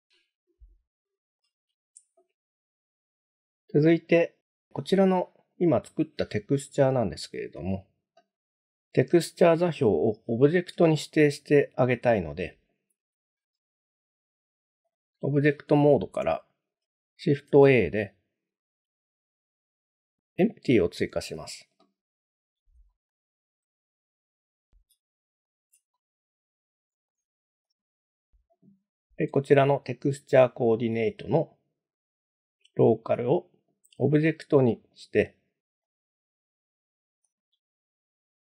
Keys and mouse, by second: 0.1-1.4 shift+middle drag, 7.1 shift+middle click, 10.9 shift+middle click, 14.9 click, 17.5 shift+a, 22.9-23.2 shift+middle drag, 23.8 g, 24.2 z, 25.4 ctrl+click, 25.9-27.1 middle drag, 32.1-35.0 drag, 35.9-37.4 drag.